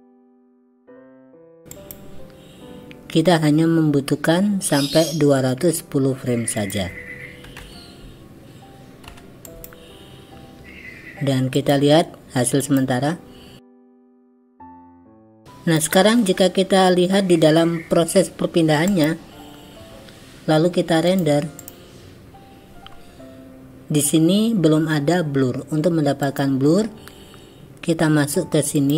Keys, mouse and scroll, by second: 0.2 click, 0.9 shift+d, 6.6-9.7 drag, 11.6 click, 12.7 click, 14.7 click, 15.3-15.9 drag, 18.9 click, 21.2-22.1 drag.